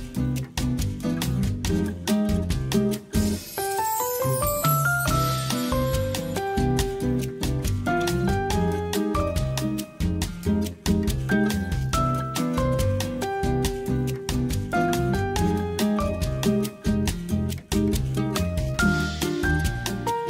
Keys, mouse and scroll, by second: 0.2-0.8 middle drag, 1.0-2.8 drag, 3.2-3.7 middle drag, 3.9 alt+z, 4.2-4.7 middle drag, 5.7 shift+click, 7.0 KP_3, 8.4 r, 10.3 shift+click, 11.4 r, 12.6 click, 13.7 ctrl+s, 14.3 middle drag, 15.0 right click, 16.2-16.9 middle drag, 17.3 click, 17.5 right click, 18.4 middle click, 19.4 ctrl+s.